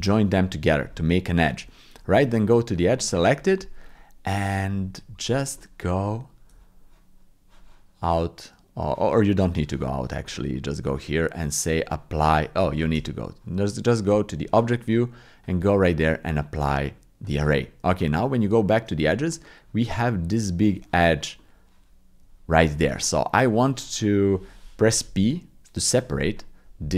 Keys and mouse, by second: 1.6 Tab, 2.7 click, 5.6 click, 6.5 Tab, 10.5 click, 11.8 click, 12.9 Tab, 15.5-17.2 drag, 17.8 Tab, 19.2 middle click, 21.4-22.5 middle drag, 24.0 middle click, 25.2 p.